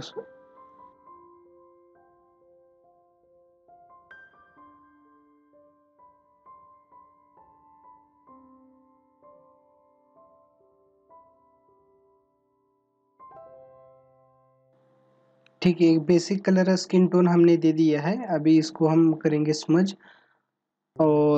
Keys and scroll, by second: 8.8 ctrl+=, 9.2 space, 9.8 ctrl+=, 10.4 space.